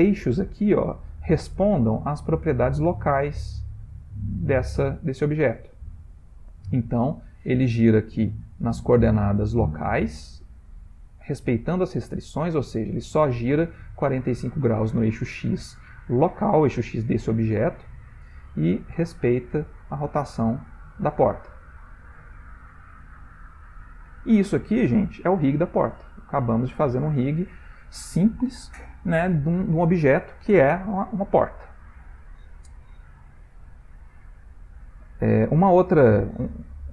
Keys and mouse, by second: 3.5 r, 8.0 r, 9.4-10.1 typing, 17.9-20.7 ctrl+middle click, 19.1 click, 20.0 middle click, 20.1 middle click, 20.2 middle click, 20.4 ctrl+middle click, 20.7 middle click, 21.4 r, 23.4 ctrl+middle click, 23.9 ctrl+middle click, 24.0 shift+middle click, 25.9 click, 26.3 x, 31.4-32.3 middle click, 31.9 middle click, 33.2 shift+middle click, 33.3 shift+middle click, 33.8 ctrl+middle click, 33.9 ctrl+middle click, 35.7 click, 36.5 ctrl+middle click.